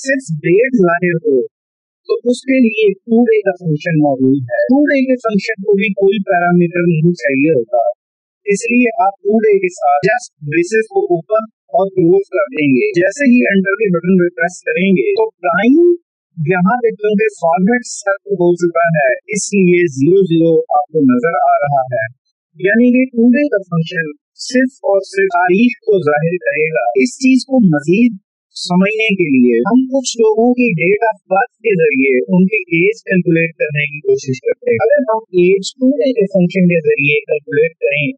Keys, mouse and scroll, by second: 1.2 Up, 4.4 =, 5.6-7.8 typing, 9.0-9.9 typing, 14.2 Return, 17.3 Up, 33.6 Up, 35.8 Down, 36.4 Left, 37.2 Right.